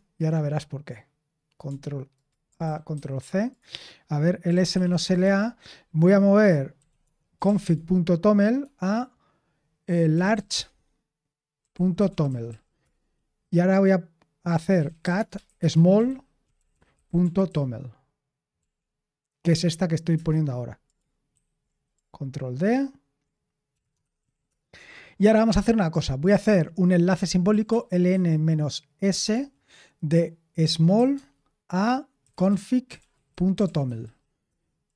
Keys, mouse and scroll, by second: 2.1 ctrl+click, 2.6 ctrl+a, 2.9 ctrl+c, 4.2-5.4 typing, 6.5-8.6 typing, 9.8-13.0 typing, 14.5-18.6 typing, 20.1 Return, 21.3 ctrl+v, 22.7 ctrl+d, 23.4-24.7 typing, 27.2-29.3 typing, 30.6-30.9 typing, 31.1 Tab, 31.9-34.5 typing.